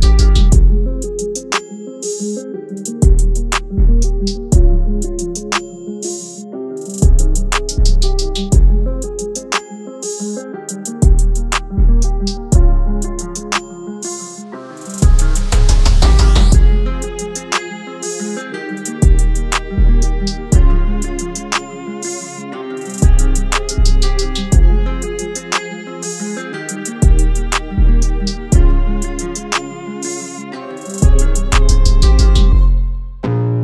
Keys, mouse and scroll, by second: 1.3 Tab, 4.6 Tab, 5.7 shift+Tab, 7.3 shift+Tab, 8.1 Tab, 12.5 click, 20.5 Tab, 21.6 shift+Tab, 22.4 click, 24.7 Up, 28.6 click.